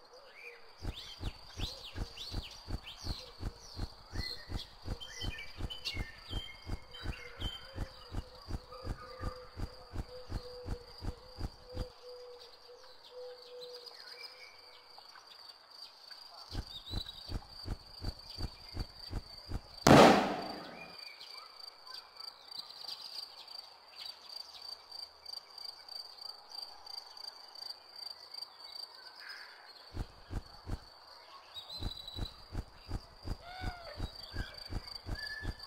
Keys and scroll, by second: 0.7 space, 5.4 m, 7.4 s, 13.4-14.2 typing, 15.5 d, 16.4 space, 19.7 q, 24.2-25.8 typing, 27.8 d, 29.8-31.6 typing, 33.8 w, 35.1-35.6 typing.